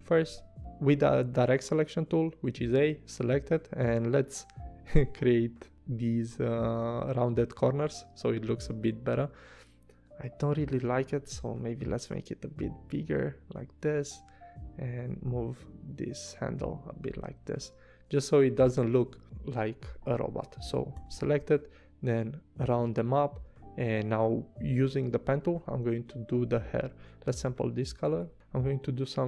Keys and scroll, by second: 1.0 a, 6.3 v, 10.2 super+z, 11.3 v, 13.9 a, 18.5 a, 19.8 v, 20.9 a, 26.6 v.